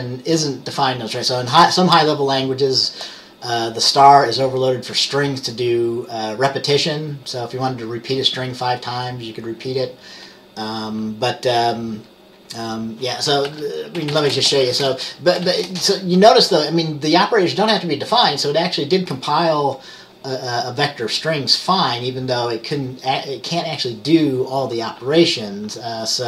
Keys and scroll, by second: 13.6-15.8 typing.